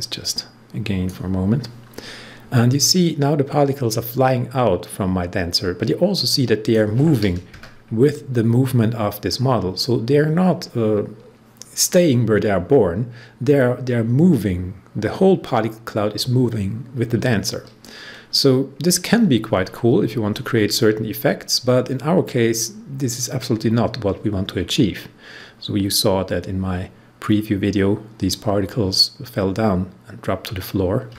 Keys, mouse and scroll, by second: 19.8 scroll down 1.